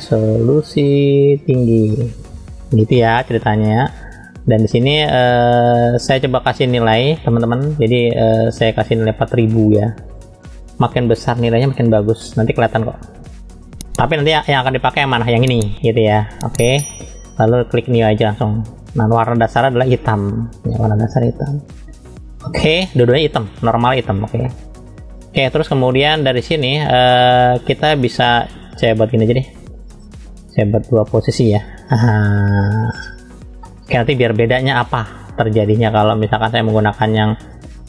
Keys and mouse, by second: 2.5 shift+g, 10.3 KP_0, 10.5 KP_0, 12.8 KP_0, 16.5-22.0 drag, 24.6-25.6 middle drag, 26.3 click, 29.4 click, 30.7 click, 32.1-33.1 drag, 33.7 middle click.